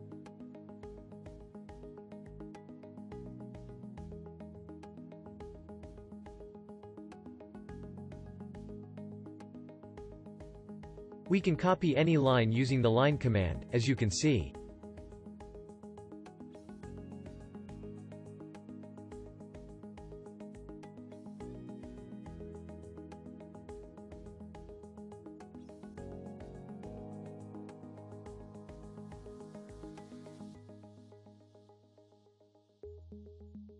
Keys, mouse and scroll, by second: 17.8-20.9 alt+drag.